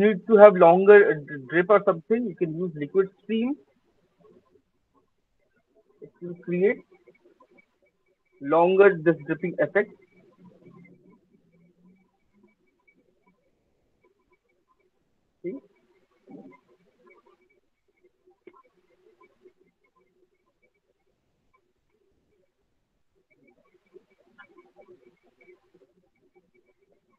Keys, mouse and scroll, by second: 2.6 click, 4.6 click, 7.7 alt+right click, 7.9 alt+middle click, 8.6 alt+click, 9.0 alt+middle click, 9.8 alt+click, 11.0 alt+click, 11.5 alt+middle click, 11.6 alt+right click, 12.2 alt+middle click, 13.5 click, 16.1 alt+click, 16.5 alt+middle click, 17.5 alt+middle click, 18.8 click, 20.1 click, 21.5 alt+middle click, 22.5 click, 23.5 alt+middle click, 24.3 click, 25.6 alt+scroll, 26.0 alt+middle click, 26.6 alt+click.